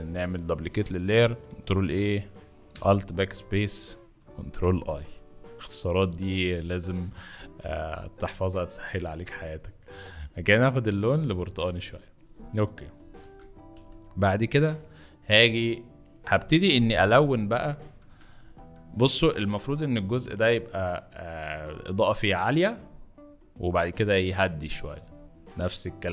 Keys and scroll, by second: 1.1 ctrl+a, 2.7 ctrl+alt+BackSpace, 4.5 ctrl+i, 13.1 ctrl+d, 13.7 ctrl+b, 17.1 ], 18.2-18.5 typing.